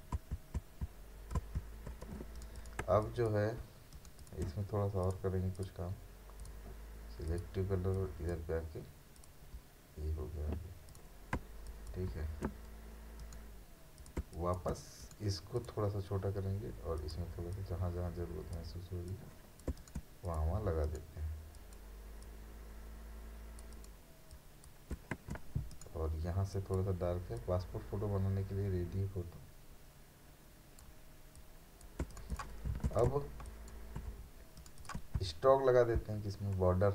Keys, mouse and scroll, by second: 2.1 space, 2.4 right click, 2.6 click, 2.8 space, 3.0 ctrl+click, 3.9 right click, 4.2 click, 9.6-10.9 scroll up 1, 10.9 click, 11.4 ctrl+space, 11.7 ctrl+click, 12.0 ctrl+space, 13.2 right click, 14.0 click, 14.2 space, 14.3 click, 15.0 right click, 15.6-19.7 drag, 19.7 space, 19.8 right click, 20.3 click, 20.8 right click, 21.5-24.9 drag, 24.9 space, 25.7 right click, 26.5-32.0 drag, 32.0 space, 32.1 right click, 32.3 click, 32.7 v, 33.1 space, 33.5 ctrl+click, 34.6 right click, 34.8 click.